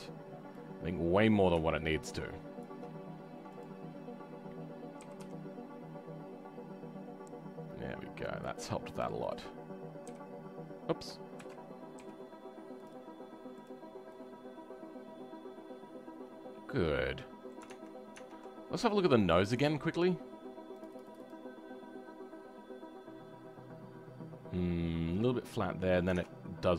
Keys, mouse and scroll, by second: 0.0-1.2 scroll up 2, 1.2 click, 5.0 g, 11.3 ctrl+z, 13.5 click, 13.9 scroll down 3, 14.1-17.2 middle drag.